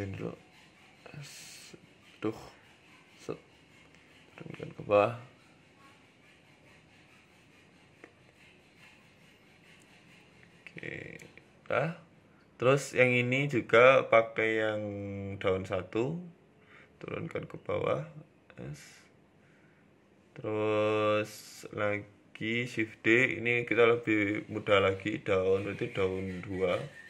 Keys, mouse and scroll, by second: 0.2-0.5 scroll up 3, 0.5 s, 2.4 s, 3.9 g, 7.4 KP_7, 8.1 shift+middle click, 8.4 g, 10.5 KP_0, 11.2 scroll down 2, 11.7 shift+middle click, 12.0-12.5 scroll down 4, 12.6 right click, 13.6 click, 18.7 scroll up 2, 18.7 s, 21.1 shift+middle click, 21.9 shift+d, 24.2 click, 24.6 click.